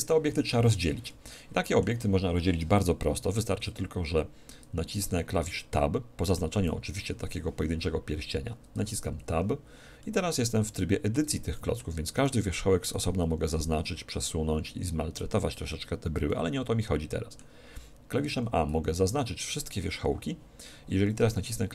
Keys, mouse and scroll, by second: 5.7-7.5 middle drag, 6.7 z, 7.8 z, 8.8 Tab, 10.0-13.3 middle drag, 12.1-14.8 right drag, 13.5 g, 16.2-18.2 middle drag, 18.3 a, 18.7 a.